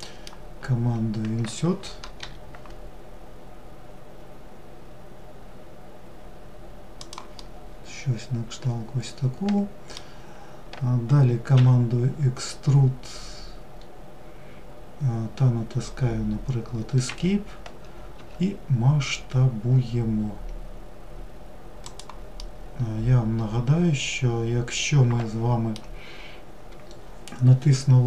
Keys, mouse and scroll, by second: 6.4-9.6 middle drag, 21.4-24.5 middle drag.